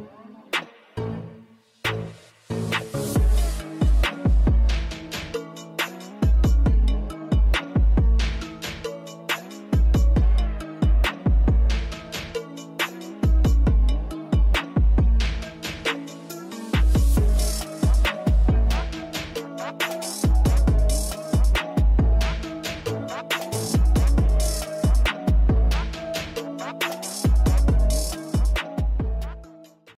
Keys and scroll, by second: 3.3 5, 3.6 Return, 6.9-7.9 typing, 8.3 Return.